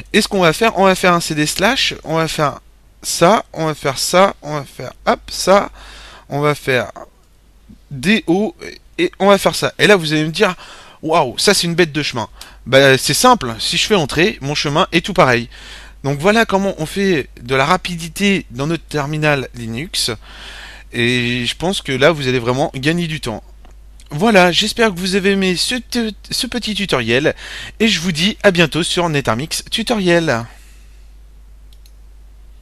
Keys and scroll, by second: 0.0-1.6 typing, 3.4 typing, 4.6-5.3 typing, 7.1 typing, 8.8 typing, 12.3 Return.